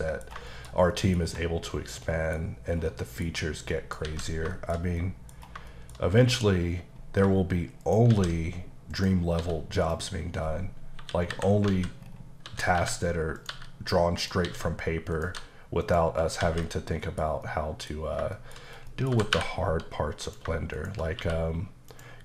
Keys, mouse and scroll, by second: 0.0 middle click, 0.5 shift+middle click, 0.7 middle click, 1.2-1.7 scroll up 2, 1.7 scroll down 2, 2.1 middle click, 2.4 scroll up 1, 3.0 middle click, 3.4-3.7 scroll up 1, 3.7 middle click, 4.0 alt+a, 4.6 shift+middle click, 5.3 scroll down 1, 5.7 shift+middle click, 6.4-7.2 scroll up 2, 7.8 shift+right click, 8.1 shift+a, 9.0 click, 9.4 s, 9.8 click, 11.0 KP_7, 11.7 alt+z, 12.0-12.4 scroll up 2, 12.4-15.3 typing, 13.4 click, 14.2 click, 15.1 click, 15.9 click, 16.6 z, 16.6 middle click, 17.5 middle click, 18.0 scroll up 1, 18.3 shift+middle click, 18.6-18.9 scroll up 1, 18.9 middle click, 19.1 g, 20.3 click, 20.8 shift+click, 21.0 click, 21.2 q, 21.9 click.